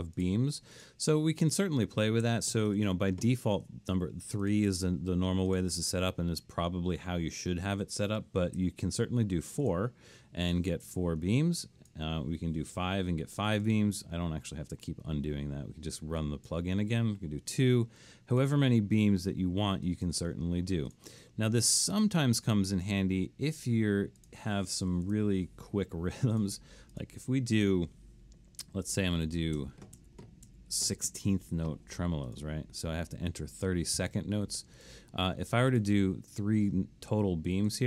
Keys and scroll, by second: 2.3-2.7 typing, 3.4 Escape, 8.6 4, 12.8 5, 17.4 2, 20.2 3, 25.1 BackSpace, 29.6-31.1 typing, 33.2 Escape.